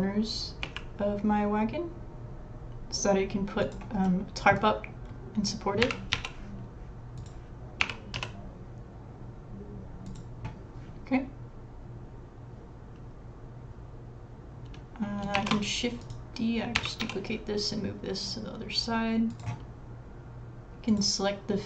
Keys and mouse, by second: 0.2 typing, 1.9 g, 4.0 middle click, 5.8-6.6 typing, 7.8 g, 15.4 shift+d, 16.8 g, 18.3 s, 20.9 click.